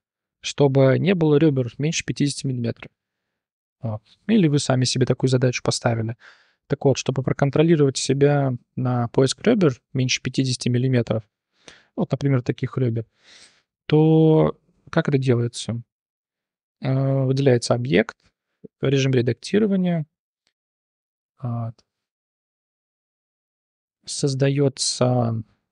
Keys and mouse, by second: 4.4 click, 10.3 Tab, 10.9 2, 12.2-12.9 drag, 13.6 Tab, 13.8-14.7 drag, 16.5 click, 18.6 Tab, 22.2 3, 22.3 click, 23.3 shift+s, 23.9 shift+a.